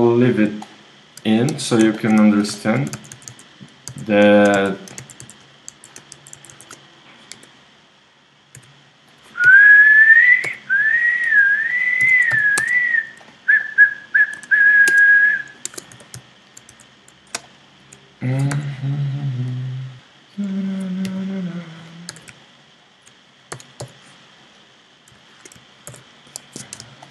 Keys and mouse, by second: 1.5 KP_3, 3.0-7.3 typing, 8.6-12.0 typing, 12.6 Tab, 14.4 Tab, 14.9 Tab, 15.6 ctrl+Tab, 16.7 z, 17.5 ctrl+click, 18.5 r, 19.5 click, 19.9 super+z, 21.0 g, 22.1 a, 23.5 w, 25.9 ctrl+r.